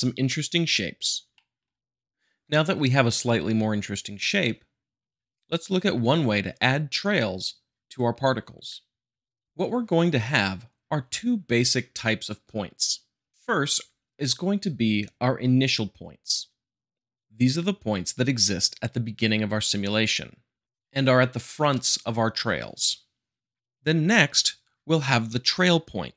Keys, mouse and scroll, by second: 1.4 shift+middle click.